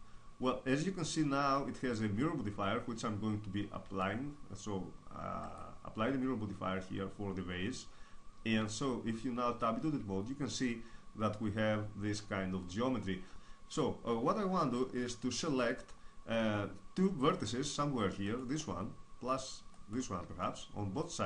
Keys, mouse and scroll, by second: 3.8 Tab, 5.3-7.0 drag, 8.5 Tab, 9.3-12.7 middle drag, 14.6-16.5 middle drag, 18.0-21.2 right drag, 20.2 middle click.